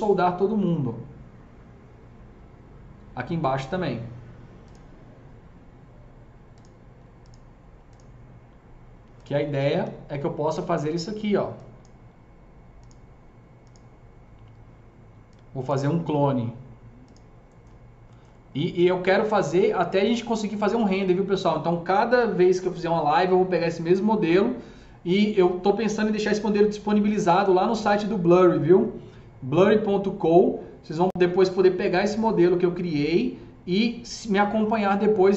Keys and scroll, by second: 9.4-11.4 typing.